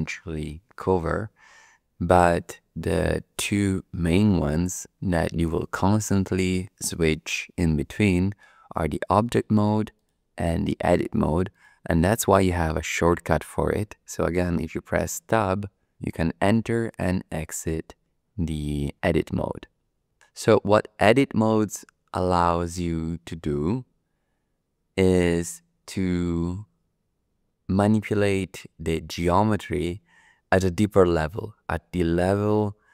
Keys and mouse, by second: 9.9 click, 11.5 click, 15.1 Tab.